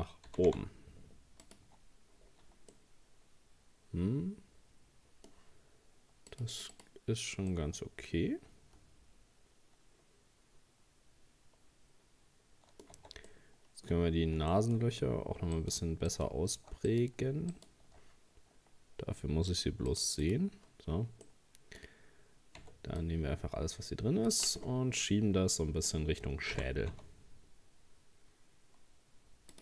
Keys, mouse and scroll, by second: 0.3 g, 1.7 Tab, 2.3-2.7 scroll down 3, 2.7-5.8 middle drag, 6.3-7.5 drag, 7.5-10.5 middle drag, 13.0 Tab, 13.3 middle click, 14.0-14.3 scroll up 2, 14.5 shift+middle click, 14.9 scroll up 2, 15.6 right click, 16.1 alt+shift+right click, 16.9 right click, 17.5 shift+right click, 19.5-21.3 drag, 21.3-22.6 middle drag, 22.6 c, 24.6-25.0 scroll down 5, 25.0-26.5 middle drag, 26.5 g.